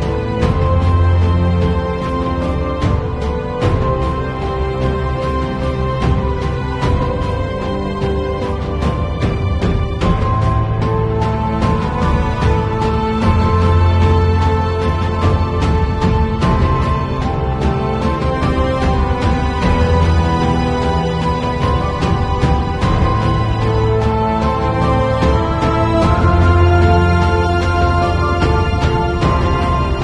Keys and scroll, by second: 16.1 super+i, 17.0 b, 19.4 2, 19.8 ], 21.5 space, 22.6 space, 23.2 space, 29.9 space.